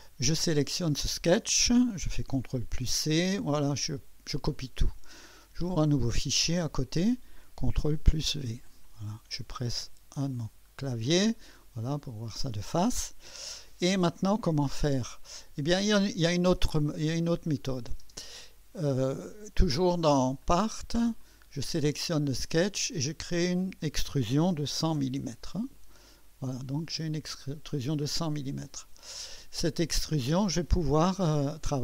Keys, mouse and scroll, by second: 0.0 click, 2.6 ctrl+c, 4.5 click, 6.5-7.8 drag, 7.8 ctrl+v, 9.9 1, 14.9-17.9 drag, 18.0 space, 19.2 click, 20.4 click, 21.2 click, 23.2 click, 24.4-25.7 typing, 26.6-31.8 drag, 27.6-28.4 typing.